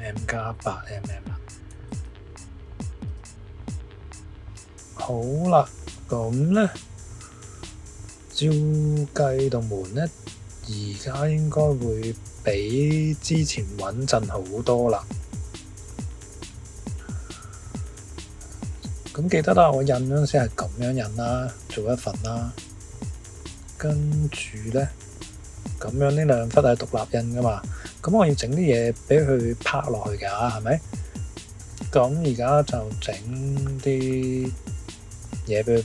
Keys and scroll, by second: 1.7 shift+=, 3.0 Return.